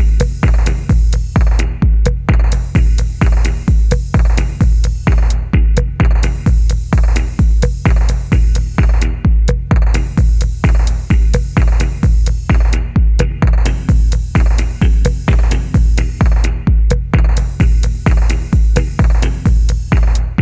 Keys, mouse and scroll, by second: 0.0 ctrl+click, 1.8 ctrl+z, 1.8 click, 3.0 ctrl+click, 5.3 double click, 7.1 middle click, 7.4-8.0 scroll up 1, 8.0 middle click, 9.6-10.4 scroll down 1, 10.4 middle click, 11.1 shift+scroll up 1, 11.4 middle click, 13.6 middle click, 16.1 ctrl+click, 17.7 ctrl+click, 18.9 typing.